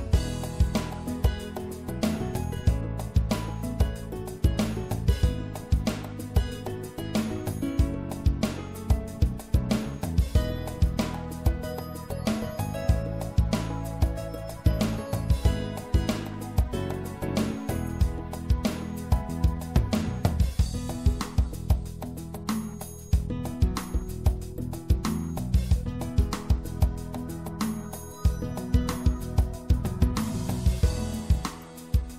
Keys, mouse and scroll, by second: 5.0 middle click, 5.8-7.1 middle drag, 7.1 click, 7.8-10.3 middle drag, 9.5 ctrl+r, 12.7-14.7 middle drag, 14.7-16.5 drag, 23.8-26.9 right drag, 26.9-28.5 drag, 28.5 middle click, 29.1 click, 29.2-31.9 right drag.